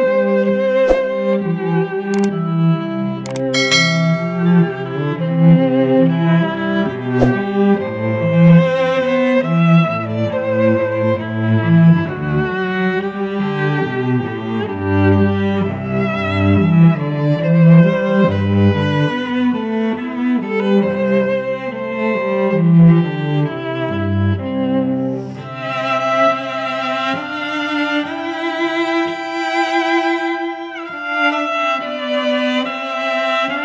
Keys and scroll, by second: 1.6 a, 2.3 space, 2.9 shift+Down, 3.9 Return, 5.1 v, 7.4 t, 8.4 v, 17.8 space, 18.3 v, 20.9 ctrl+alt+g, 22.2 ctrl+t, 26.1 Return, 27.2 space, 29.5 space, 30.0 ctrl+h, 31.0 t, 32.9-33.6 typing.